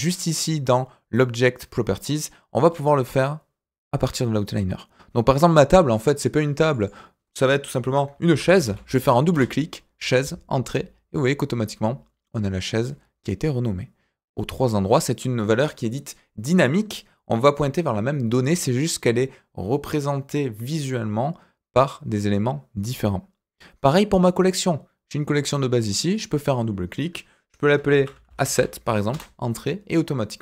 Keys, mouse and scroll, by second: 6.7 click, 6.8-9.3 drag, 24.1 click, 26.0 click, 26.1-28.1 drag, 28.1-29.1 right drag, 28.2 s.